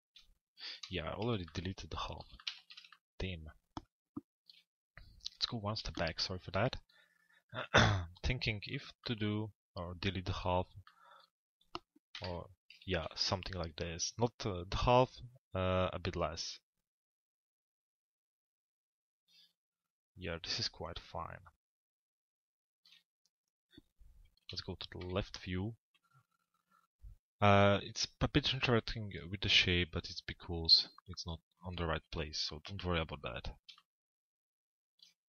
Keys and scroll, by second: 0.7 p, 11.9 Delete, 24.2 l, 25.0 z, 32.2 p.